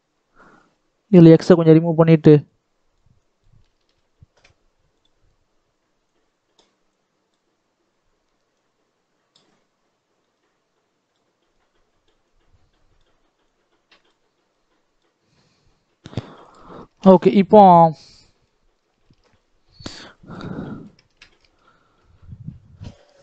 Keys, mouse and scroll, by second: 1.8-3.6 drag, 3.6 ctrl+z, 5.0-16.4 drag, 18.0 scroll down 2, 18.0 middle click, 18.6-18.9 scroll down 1, 18.9 shift+middle click, 19.2-19.8 scroll up 5, 19.8-23.2 shift+middle drag.